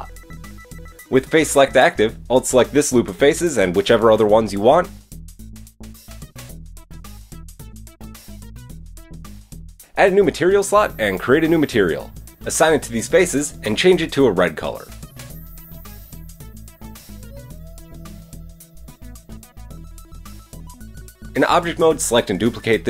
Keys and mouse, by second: 0.0-5.0 drag, 0.4 Tab, 0.4 Tab, 5.5 alt+shift+drag, 7.4 ctrl+alt+shift+z, 9.7 alt+shift+click, 13.9-15.5 middle drag, 17.9 Tab, 20.2 KP_3, 22.3 shift+Tab, 22.5 shift+d.